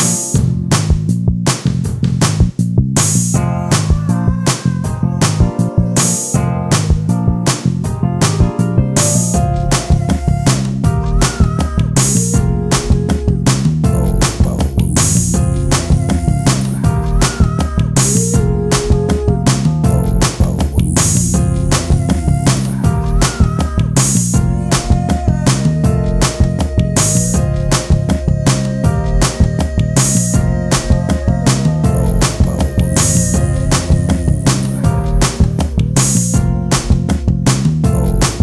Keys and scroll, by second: 7.1 space, 7.7 t, 10.0 ctrl+space, 14.0 ctrl+m, 35.1 space, 37.6 space.